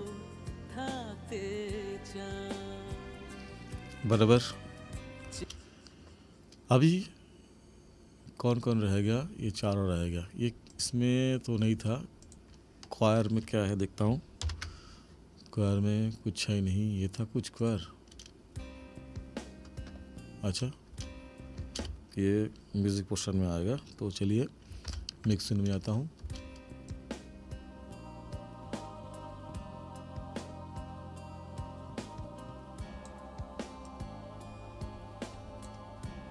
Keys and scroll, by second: 5.4 space, 14.4 ctrl+=, 18.2 space, 20.5 space, 24.9 ctrl+=, 26.2 space.